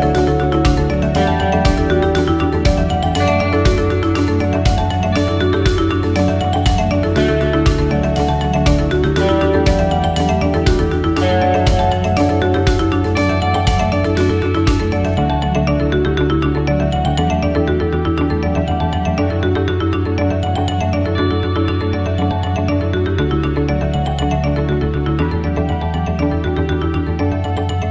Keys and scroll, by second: 8.5 ctrl+0, 11.0 ctrl+c, 11.2 ctrl+v, 14.1 ctrl+v.